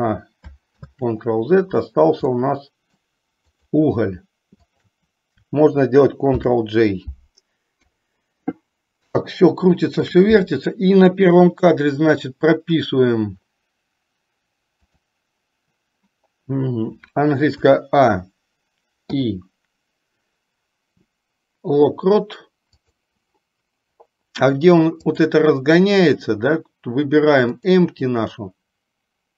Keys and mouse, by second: 1.0 ctrl+z, 2.5-3.2 middle drag, 3.7 click, 4.9 shift+click, 7.9 KP_3, 9.4-10.4 shift+middle drag, 15.0 click, 25.2 click, 27.6 click.